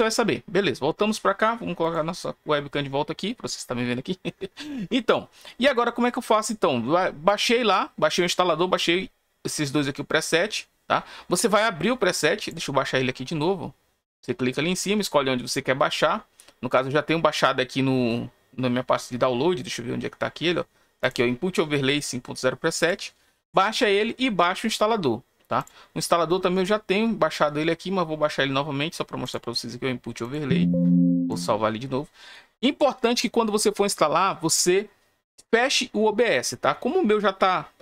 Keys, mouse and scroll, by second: 1.8 click, 7.2 click, 12.3 click, 20.0-20.4 scroll up 4, 20.4 scroll down 1, 21.0 click, 22.8 click, 25.5 click, 29.2 click, 30.2 click, 31.2 click.